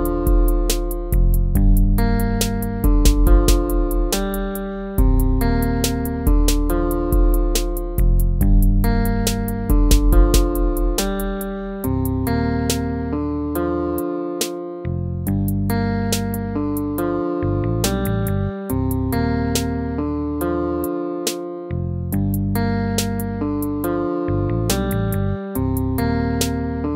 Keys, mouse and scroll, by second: 5.0 ctrl+-, 5.7 ctrl+-, 6.7 ctrl+-, 10.2 ctrl+-, 14.4 ctrl+z, 15.0 ctrl+-, 15.7 ctrl+-, 16.8 ctrl+-, 24.9 BackSpace.